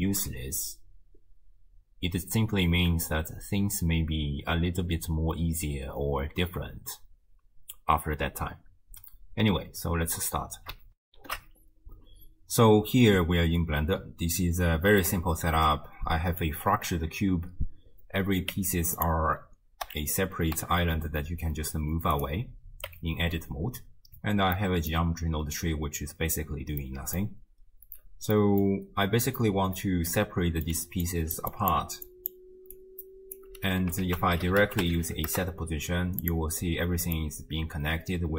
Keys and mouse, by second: 11.1 ctrl+alt+shift+w, 11.3 ctrl+alt+shift+q, 15.1-16.5 drag, 18.6 Tab, 19.0 click, 19.9 l, 20.6 g, 22.9 Tab, 24.6 click, 26.9 click, 28.4 click, 29.5-30.7 drag, 30.8-33.5 typing, 31.1 click, 31.5 click, 32.1 click, 32.7 click, 34.0 ctrl+a, 37.2-38.3 drag.